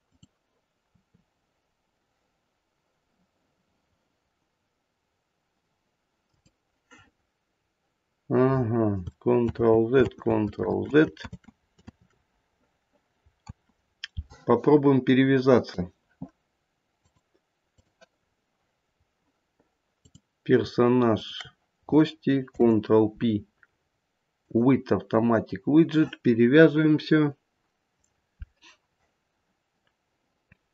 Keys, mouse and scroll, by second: 0.0 click, 0.9 r, 6.9-8.1 scroll down 1, 8.1-8.6 scroll up 1, 9.5 ctrl+z, 10.0 ctrl+z, 10.6 ctrl+z, 11.2 ctrl+z, 11.9 ctrl+z, 13.5 ctrl+z, 14.5-15.1 scroll down 2, 16.4-16.9 scroll down 1, 16.9 click, 18.2-18.9 scroll up 2, 18.9-19.9 scroll down 2, 19.9 click, 21.1 shift+click, 22.4 ctrl+p.